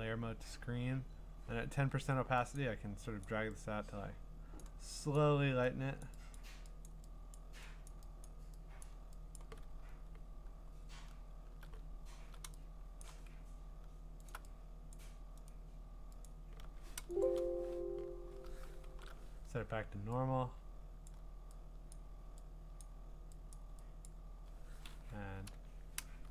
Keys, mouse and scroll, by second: 2.6 click, 3.2 click, 4.6 click, 5.2 click, 6.0 click, 6.4 click, 6.9 click, 7.3 click, 7.9 click, 8.2 click, 8.8 click, 9.4 click, 9.8-11.9 scroll, 13.3 click, 14.3 shift+click, 14.9 click, 15.5 right click, 17.0 click, 17.2 click, 18.9 alt+shift+n, 21.1 click, 21.9 click, 22.8 click, 23.5 click, 24.1 click, 25.2-26.3 typing.